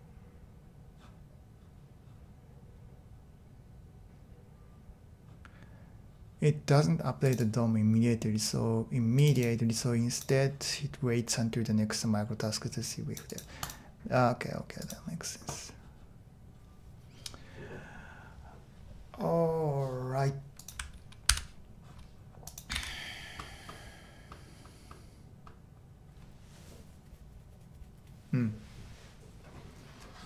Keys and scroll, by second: 21.3 super+h, 22.7 super+e.